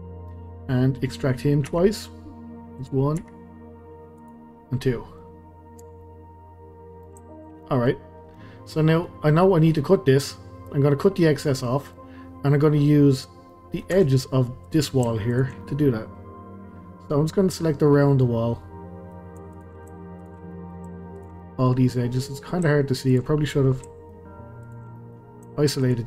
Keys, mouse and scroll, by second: 0.6-1.0 scroll down 1, 1.0 middle click, 1.7 e, 3.2 e, 4.5-4.9 scroll down 1, 4.9-5.4 middle drag, 5.4-5.8 scroll up 1, 5.8 Tab, 6.0-13.2 middle drag, 13.2 click, 13.5-13.9 middle drag, 13.9 Tab, 14.2 middle click, 14.7 click, 15.3 shift+click, 15.6-19.5 middle drag, 19.5 shift+click, 20.2 shift+click, 20.5-21.2 middle drag, 21.2 shift+click, 21.4-23.1 middle drag, 23.1 shift+click, 23.5-24.6 middle drag, 24.6 shift+click, 24.9-25.8 middle drag, 25.8 shift+click.